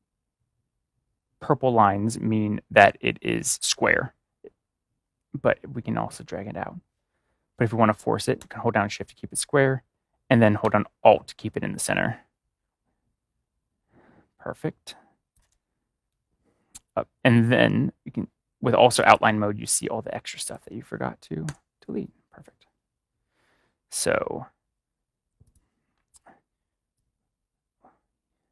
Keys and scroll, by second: 21.4 BackSpace.